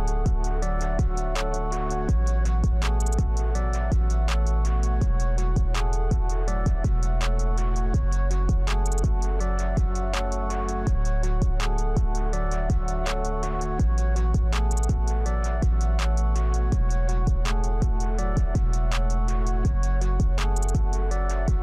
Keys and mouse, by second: 2.5 click, 4.3 click, 5.2 click, 6.8 click, 7.4 click, 20.3 click.